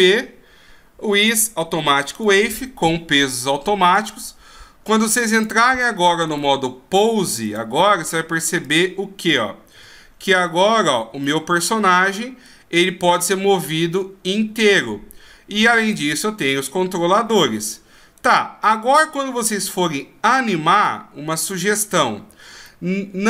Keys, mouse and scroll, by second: 4.0 right click, 5.3 click, 6.3 right click, 7.4 click, 9.8 g, 11.2 middle click, 13.1 g, 15.8 right click, 16.4 g, 18.2 right click, 19.0 g, 20.7 right click, 21.4 g, 22.7 middle click.